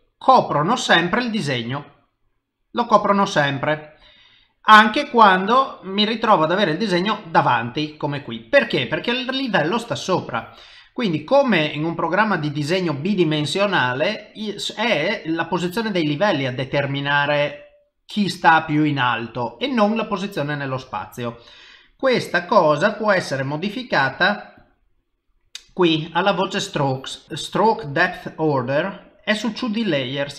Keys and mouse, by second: 7.3 middle click, 10.2 click, 10.7 middle click, 16.1 middle click, 18.7 middle click, 21.6 middle click, 24.2 click, 24.6 click, 25.0 middle click, 29.6 click.